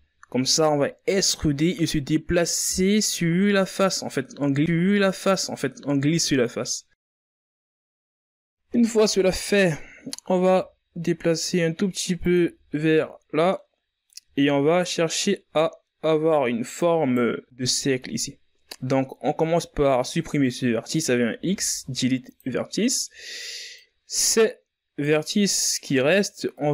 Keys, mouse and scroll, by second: 7.4 z, 8.2-8.8 ctrl+scroll up 4, 8.8-9.2 shift+scroll down 4, 9.2-9.6 scroll up 4, 10.0 g, 11.9 z, 12.8-13.1 scroll down 2, 13.1 middle click, 13.9 ctrl+scroll down 3, 14.4-16.3 middle drag, 16.3 right click, 17.0 scroll up 3, 18.4 scroll down 2, 18.7-19.7 middle drag, 19.7 scroll up 1, 20.8 x, 23.3 right click, 25.1 right click, 26.1 right click.